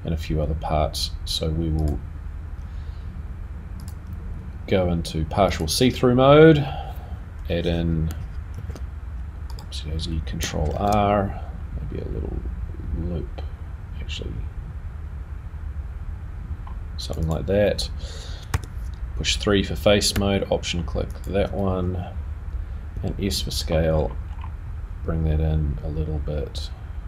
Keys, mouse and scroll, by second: 2.0 click, 3.8 click, 6.1 click, 6.1-7.7 scroll up 4, 8.5 r, 10.7 ctrl+r, 18.5 3, 21.1 alt+click, 22.9 s.